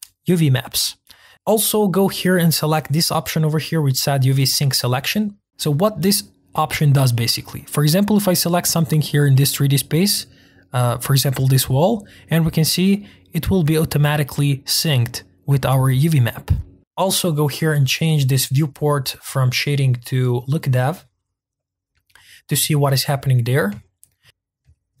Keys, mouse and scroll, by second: 0.6 click, 1.0 click, 1.3 click, 8.5 click, 9.0-9.3 scroll up 1, 9.3-9.9 scroll down 1, 9.9-10.4 scroll down 2, 10.4-11.7 middle drag, 11.7-15.2 scroll up 1, 20.5 click, 22.1-22.7 scroll up 2, 22.7-25.0 shift+middle drag.